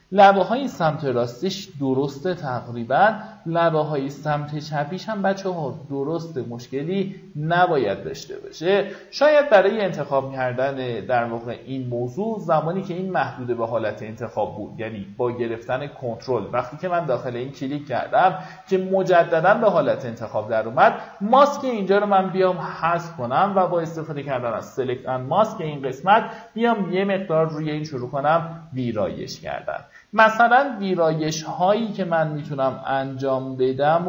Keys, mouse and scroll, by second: 1.5-7.5 drag, 8.1 ctrl+click, 9.5 click, 10.9 right click, 14.3 click, 16.8 right click, 17.8 click, 19.2-19.6 alt+scroll down 1, 20.7-21.0 alt+scroll up 1, 21.3 alt+scroll up 1, 22.8 click, 28.8-29.2 alt+scroll up 1, 29.4 alt+scroll up 1, 30.5-34.0 drag.